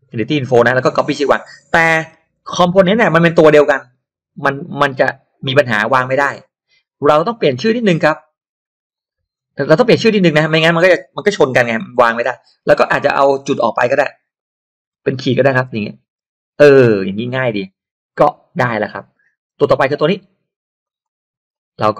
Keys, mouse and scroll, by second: 0.8 click, 2.0 ctrl+v, 2.4 ctrl+v, 4.9 click, 6.2-7.5 drag, 7.7 click, 8.9-10.7 drag, 11.9 ctrl+v, 12.1 ctrl+v, 12.3 ctrl+v, 14.3-15.5 drag, 15.5 BackSpace, 18.2 click, 20.8 click, 21.0 click, 21.5 click.